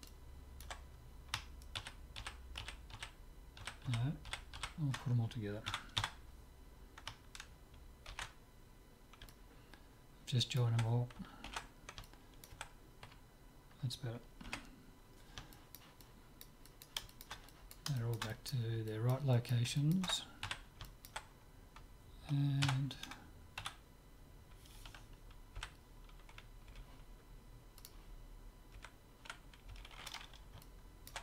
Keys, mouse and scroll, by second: 1.9 ctrl+z, 2.3 ctrl+z, 2.7 ctrl+z, 3.0 ctrl+z, 3.7 ctrl+z, 4.1 ctrl+z, 4.4 ctrl+z, 4.7 ctrl+z, 5.7 a, 6.1 a, 8.1 ctrl+j, 9.3-11.3 middle drag, 11.5 alt+g, 12.1-14.1 middle drag, 13.1 KP_3, 14.5 KP_7, 15.6-22.9 middle drag, 20.5 z, 22.7 Tab, 23.7 a, 25.6 l, 26.7 l, 27.8-29.6 drag, 28.8 l, 29.8 l, 30.7-31.2 middle drag.